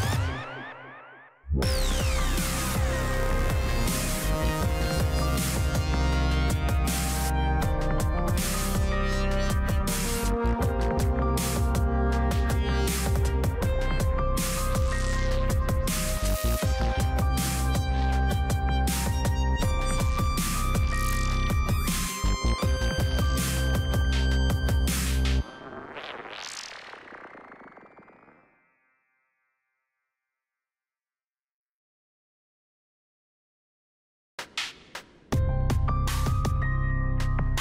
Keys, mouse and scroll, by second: 2.9 right click, 4.0 click, 6.7 scroll down 1, 8.6-19.3 drag, 21.0-21.5 typing, 21.9 Return, 23.0 click, 24.8 scroll up 1, 26.3 click, 29.5-30.0 typing, 30.4 Return, 31.4 click, 32.4 right click, 33.2 click, 37.2 scroll down 1.